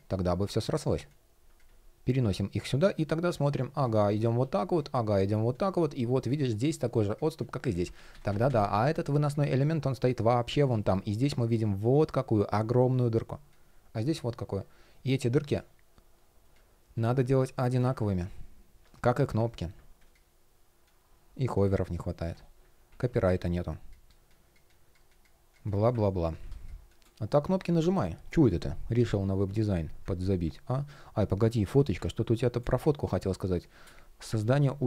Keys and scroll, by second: 2.9 shift+p, 7.4 super+z, 10.5 shift+p.